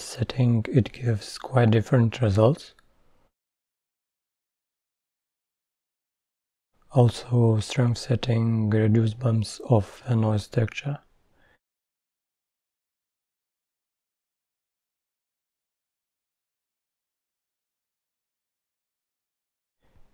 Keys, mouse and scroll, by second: 5.0 KP_0, 6.3-10.1 middle drag, 10.1-12.5 drag, 12.5 scroll down 1, 12.7-13.8 scroll up 2, 13.8-16.8 drag, 16.8 scroll down 3, 17.0-17.4 middle drag, 17.4-17.9 scroll up 2.